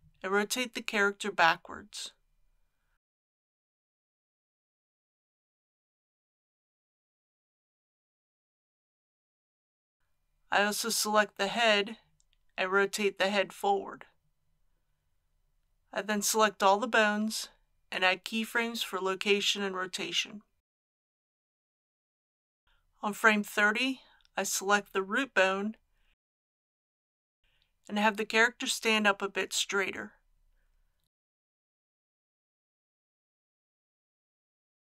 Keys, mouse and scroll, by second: 2.3 KP_3, 3.4 r, 4.1 x, 7.4 click, 12.2 r, 12.5 x, 14.4 click, 16.1 a, 17.5 i, 19.2 click, 24.3-24.9 scroll down 1, 24.9 middle click, 26.8 click, 27.2-27.8 scroll down 1, 27.8-29.0 middle drag, 30.4 g.